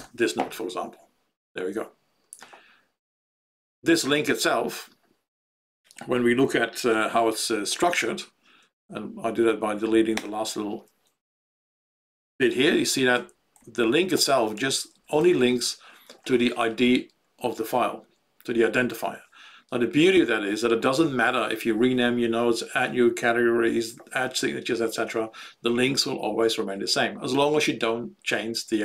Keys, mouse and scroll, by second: 10.1 BackSpace, 12.4 Home, 13.1 ctrl+Right, 13.5 ctrl+Left, 14.1 ctrl+space, 14.5 ctrl+Right, 14.7 ctrl+Right, 14.9 ctrl+Right, 15.1 ctrl+Left, 15.3 ctrl+Left, 15.5 ctrl+Right.